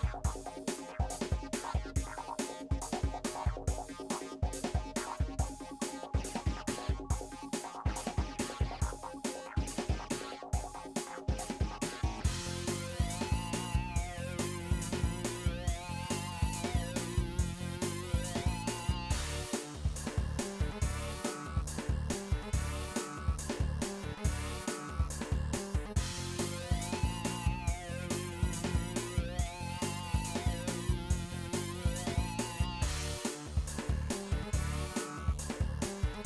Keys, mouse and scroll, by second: 0.1-1.4 middle drag, 1.4 shift+click, 2.0 typing, 2.4 middle click, 2.7 shift+click, 3.1 typing, 3.6 middle click, 4.1 KP_1, 4.6 click, 5.4 scroll up 3, 5.7 click, 5.8 shift+middle click, 6.6 click, 7.7 s, 8.3 click, 9.0 s, 9.6 click, 10.5 s, 11.2 shift+middle click, 11.4 click, 11.9 s, 12.9 KP_3, 13.3 shift+middle click, 13.5-13.9 scroll down 1, 14.0-15.2 shift+middle drag, 15.2 click, 15.7 s, 16.5-16.8 scroll down 2, 16.8 shift+middle click, 17.2 click, 17.6-18.1 scroll up 1, 18.4 shift+middle click, 19.0 s, 19.7 click, 20.2 s, 20.9-21.4 scroll down 4, 21.4 middle click, 22.0 click, 22.2-24.1 middle drag, 24.1 3, 24.2 shift+click, 24.8 scroll up 2, 25.0 middle click, 25.6 e, 26.7-28.9 drag, 28.9 e, 29.4-32.0 drag, 32.0 middle click, 32.4 shift+click, 32.8 e, 33.4-34.7 drag, 34.7 middle click, 35.5 shift+click, 35.9 e.